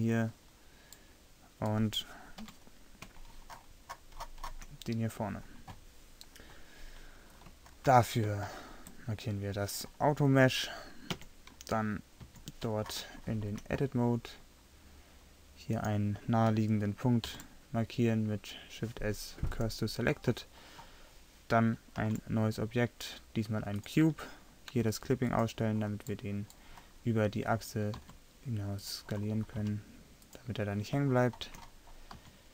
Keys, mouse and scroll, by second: 2.4 KP_3, 7.7-8.5 middle drag, 11.3 Tab, 12.3 a, 15.8-17.3 right drag, 17.3 shift+s, 22.1 shift+a, 26.4-27.6 middle drag, 28.0 s, 29.7 s, 32.2 s.